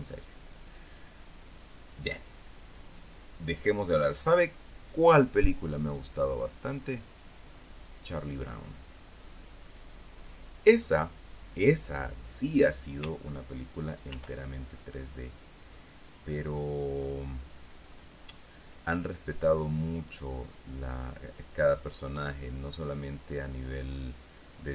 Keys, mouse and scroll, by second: 0.0 ctrl+r, 0.7 click, 2.6 click, 4.6 click, 6.3 right click, 7.3-8.6 drag, 14.6 ctrl+r, 16.6 click, 20.5 right click, 22.4 middle click, 23.4 click.